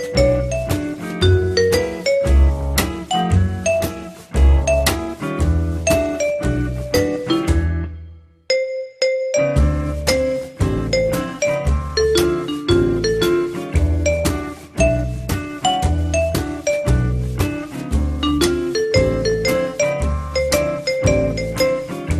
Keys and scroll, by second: 6.3 t, 11.8 l, 14.6 F3, 20.4 c, 21.7 F3.